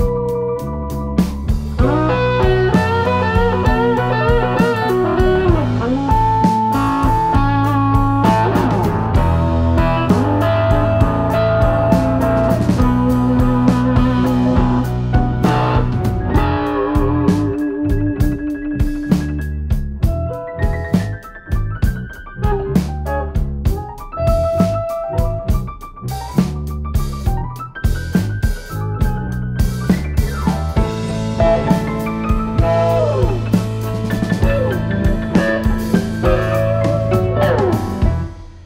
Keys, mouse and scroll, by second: 0.2 click, 1.8 click, 2.5 click, 5.2 click, 6.4 click, 8.0 click, 9.1 middle click, 10.7 click, 11.8 middle click, 14.9 click, 15.2 Tab, 19.1 click, 20.7 right click, 24.3 Tab, 25.5 right click, 32.4 shift+c, 34.5 right click, 38.4-38.6 scroll up 7.